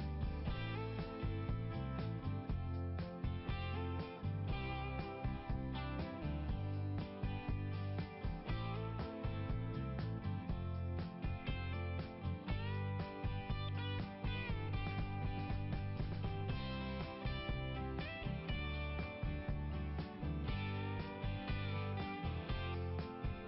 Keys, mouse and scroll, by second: 1.0-1.5 scroll up 2, 4.2 scroll down 1, 5.1 click, 6.3 click, 6.4 click, 8.2-8.6 scroll up 1, 10.8 scroll down 1, 13.2 click, 14.4 click, 15.2 click, 15.5 click, 15.8 click, 17.4 click, 18.4 click, 19.7 click, 19.9 click, 22.6 click.